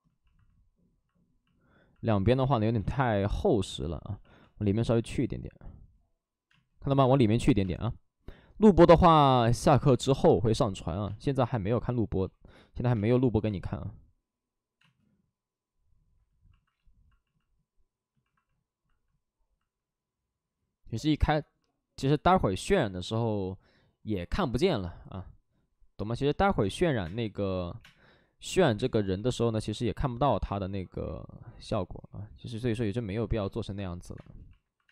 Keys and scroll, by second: 1.9 space, 2.5 alt+s, 4.2 alt+s, 4.3 space, 10.1 space, 10.9 space, 12.1 ctrl+z, 12.8 space, 13.3 space, 26.5 space, 26.9 3, 27.6 space, 27.6 3, 29.0 space, 29.0 3, 30.3 space, 33.3 space, 34.4 space.